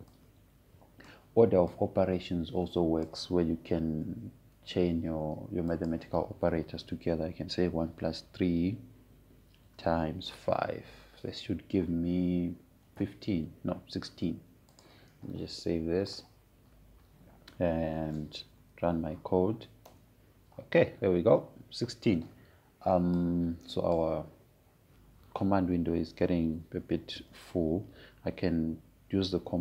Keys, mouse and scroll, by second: 1.8-5.4 drag, 5.4 BackSpace, 7.4 click, 11.2 click, 11.4 shift+8, 12.0 5, 16.4 click, 20.3 Up, 21.5 Return, 24.9-28.1 drag.